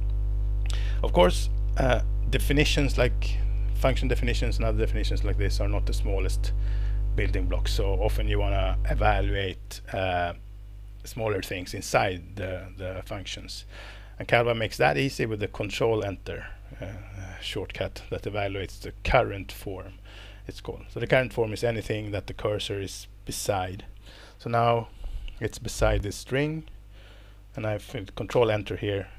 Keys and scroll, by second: 28.3 ctrl+Return.